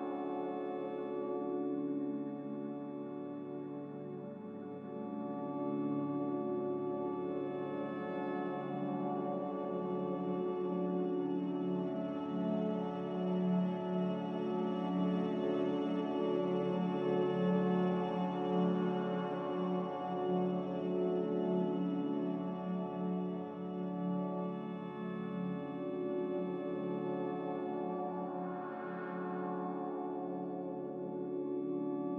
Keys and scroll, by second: 3.1 m, 9.2 Escape, 9.3 Escape, 9.8 Escape, 10.0 b, 11.2 Delete, 16.0 z, 17.9-23.1 typing, 24.4 typing, 27.6 z.